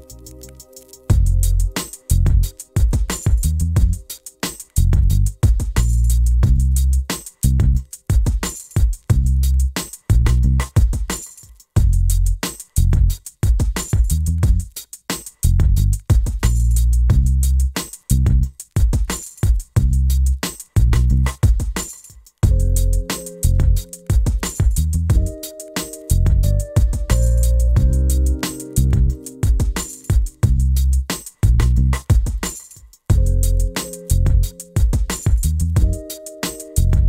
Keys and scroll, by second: 19.0 2, 19.1 0.